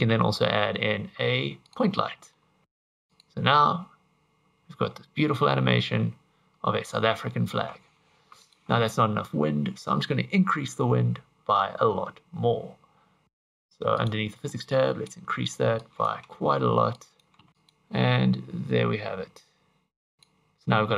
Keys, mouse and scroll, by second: 0.2 shift+a, 2.0 middle click, 2.6 middle click, 2.6 g, 3.1 click, 3.8 scroll up 4, 4.9 scroll up 1, 5.0 middle click, 8.2 Escape, 8.4 click, 13.2 click, 14.0 click, 14.7 click, 15.8 click, 16.9 click, 17.5 middle click, 17.5 click, 17.6 click, 20.2 click.